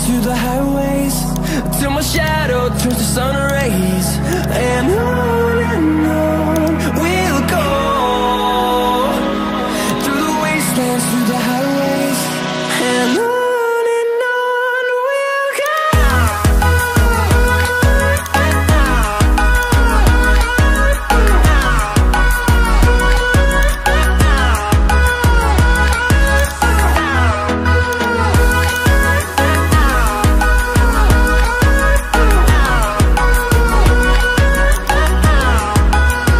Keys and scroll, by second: 0.7-1.1 typing, 9.1 typing.